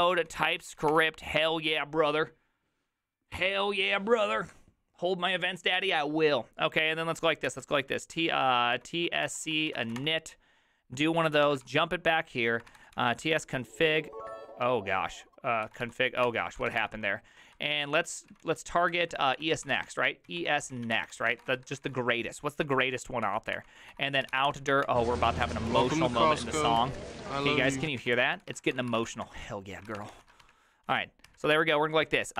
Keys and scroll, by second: 0.0-1.4 typing, 9.9 typing, 11.3 Return, 11.3 ctrl+a, 11.4-13.9 typing, 15.4-22.3 typing, 17.5 ctrl+d, 22.6 ctrl+d, 23.0 ctrl+d, 23.5 ctrl+d, 23.6-30.5 typing, 30.9 ctrl+a, 31.3 ctrl+a, 31.6 ctrl+c, 32.1-32.3 typing.